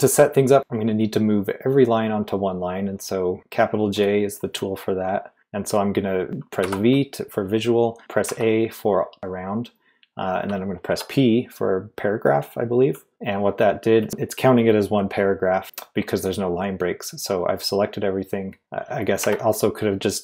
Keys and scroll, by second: 6.6 typing, 8.2 typing, 10.9 typing, 19.2 typing.